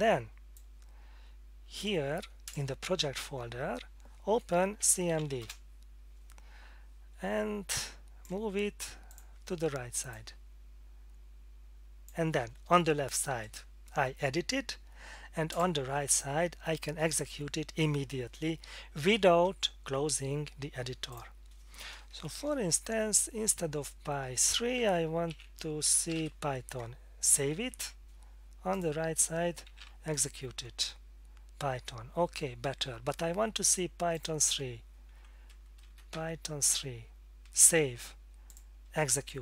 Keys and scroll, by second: 4.9-5.7 typing, 22.5 Left, 22.6 Left, 24.4 Delete, 25.3-26.7 typing, 27.4 ctrl+s, 29.5-30.2 typing, 30.8 Return, 36.1 3, 37.6 ctrl+s.